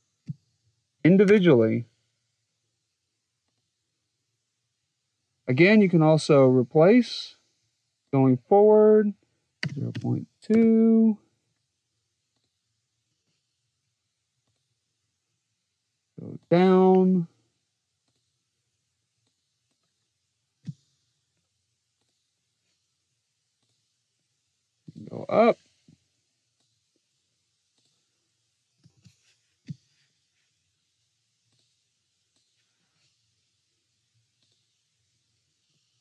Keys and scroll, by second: 1.1 Tab, 9.4 0, 9.8 ., 10.4 2, 20.4 0, 28.3-29.4 typing.